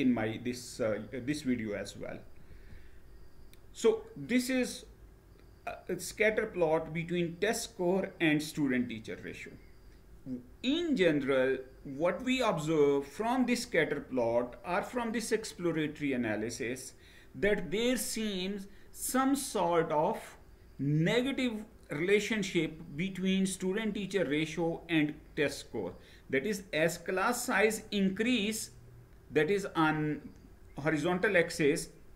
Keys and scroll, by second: 2.1 Right.